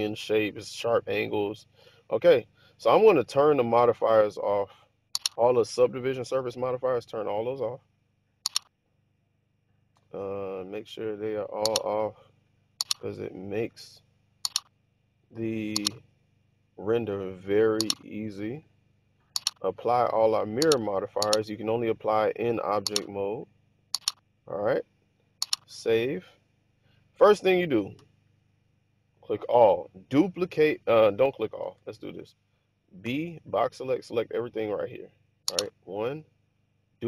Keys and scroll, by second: 1.5 Tab, 25.6 super+s, 28.1 a, 33.1 b, 35.8 1.